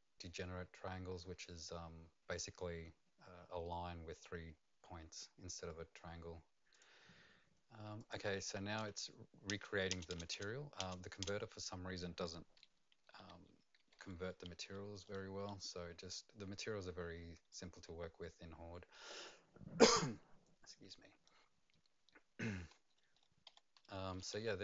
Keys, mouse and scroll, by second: 6.7 click, 8.0 click, 9.5 Return, 9.9 Return, 10.1 Return, 10.3 Return, 10.8 Return, 13.8-24.6 typing, 14.4 Return, 14.4 click.